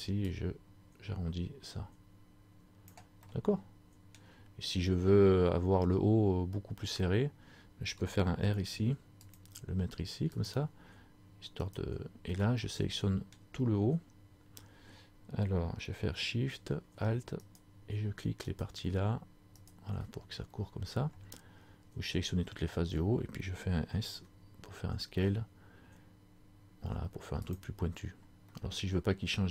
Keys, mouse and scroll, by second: 3.5 middle click, 8.5 ctrl+r, 11.7 alt+right click, 12.7 middle click, 17.5 alt+shift+right click.